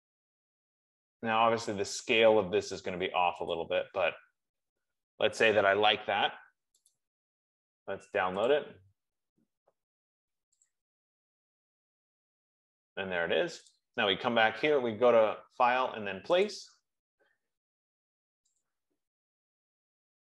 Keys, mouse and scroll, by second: 0.2 click, 2.5 scroll, 4.0 click, 7.4 right click, 8.9 click, 11.1 click, 17.0 click, 19.1 click.